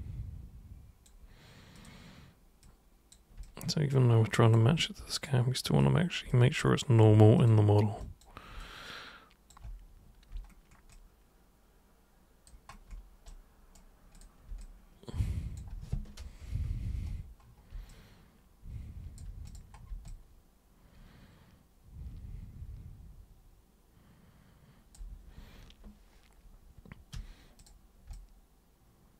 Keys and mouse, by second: 1.7 super+click, 2.6 super+click, 3.4-4.5 alt+super+drag, 5.1 super+click, 5.8 super+click, 6.3-6.9 alt+super+drag, 7.4 super+click, 8.0 super+click, 8.6-9.5 alt+super+drag, 10.9-12.4 alt+super+drag, 13.2 super+right click, 14.1 super+click, 14.6 alt+super+click, 17.9-19.2 alt+super+drag, 19.4 super+click, 20.0-24.9 alt+super+drag, 27.1 super+3, 27.5 super+click, 28.1-29.1 alt+super+drag.